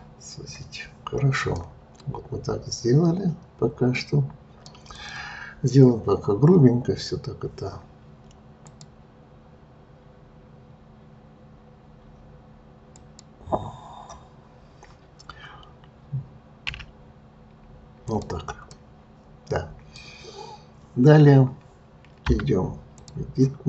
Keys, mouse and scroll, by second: 1.5-4.6 middle drag, 4.9 click, 8.6 click, 12.9 click, 16.6 s, 18.7-21.7 middle drag, 22.3 Tab, 22.9 click.